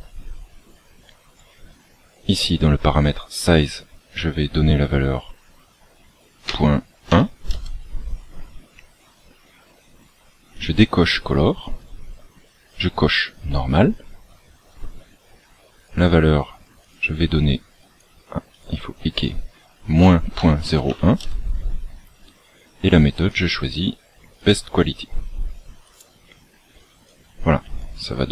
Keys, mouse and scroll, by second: 8.6-9.2 scroll down 8, 10.5 click.